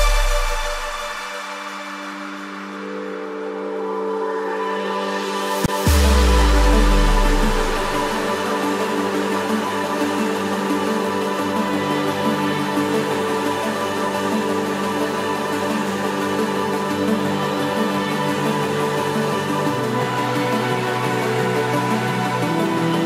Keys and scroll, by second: 10.1 ctrl+=.